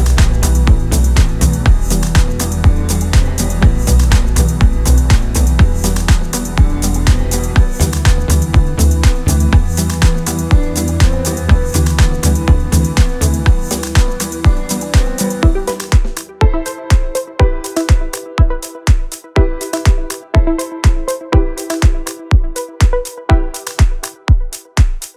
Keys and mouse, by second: 0.5 d, 0.5 click, 1.0 right click, 1.0 d, 1.0 d, 1.1 shift+middle click, 2.2 shift+middle click, 2.6 shift+middle click, 2.9 middle click, 4.0 Tab, 4.2 middle click, 4.3 middle click, 5.0 click, 5.9 ctrl+c, 5.9 ctrl+v, 6.0 click, 6.1 middle click, 6.2 click, 6.5 middle click, 6.8 click, 7.0 click, 7.3 click, 7.4 middle click, 7.5 shift+middle click, 8.4 shift+middle click, 9.7 shift+middle click, 10.1 KP_1, 10.4 shift+middle click, 10.5 middle click, 10.7 click, 11.1 KP_1, 11.2 shift+middle click, 11.5 click, 12.8 middle click, 13.4 middle click, 13.5 middle click, 14.6 KP_1, 15.0 middle click, 15.8 click, 17.5 middle click, 17.8 shift+middle click, 18.2 middle click, 18.5 middle click, 18.6 middle click, 18.8 middle click, 19.2 middle click, 19.5 shift+middle click, 19.6 d, 19.6 click, 19.8 click, 22.0 right click, 22.0 d, 22.2 d, 22.4 middle click, 23.3 middle click, 24.6 click, 25.1 KP_1.